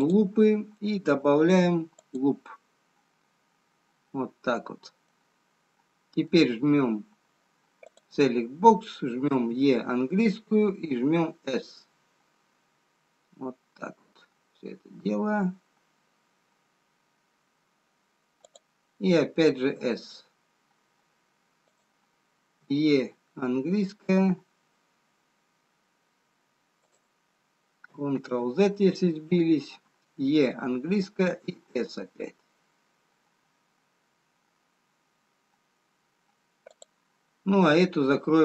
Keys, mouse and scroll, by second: 2.5 click, 3.5 scroll up 1, 5.5 middle click, 5.5 scroll down 2, 6.8 scroll down 1, 9.2 click, 9.2 e, 20.4 s, 22.6 e, 28.5 ctrl+z, 31.7 e.